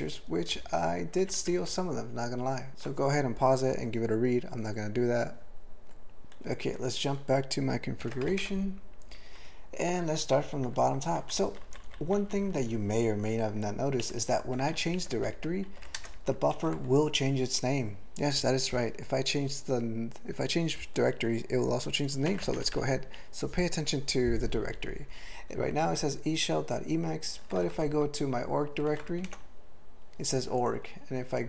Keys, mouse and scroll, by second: 0.0 ctrl+l, 0.5 ctrl+p, 0.7 ctrl+p, 0.9 ctrl+p, 1.2 ctrl+n, 1.4 ctrl+n, 1.5 ctrl+n, 10.2 ctrl+n, 10.4 ctrl+n, 10.6 ctrl+n, 10.8 ctrl+n, 11.3 alt+b, 11.4 alt+b, 11.6 alt+b, 11.8 alt+b, 12.0 alt+b, 12.2 alt+b, 12.4 alt+b, 12.6 alt+b, 14.0 alt+f, 14.2 alt+f, 14.4 alt+f, 14.6 alt+b, 14.8 alt+b, 15.0 alt+f, 15.2 alt+f, 15.3 alt+f, 15.7 alt+b, 16.0 ctrl+space, 16.1 ctrl+alt+f, 16.5 ctrl+g, 27.5 typing, 28.9 ctrl+g, 29.3 Return.